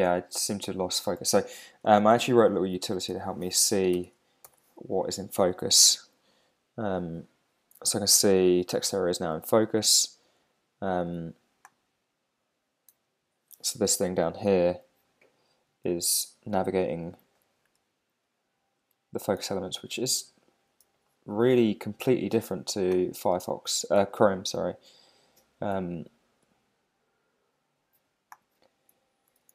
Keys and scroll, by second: 1.2 super+Tab, 2.7 Down, 2.9 Up, 3.2 alt+shift+Left, 3.9 super+s, 4.0 super+Tab, 4.4 super+r, 12.9 Tab, 16.5 Tab, 19.8 super+z, 21.2 Escape, 23.4 Tab, 24.3 shift+Tab.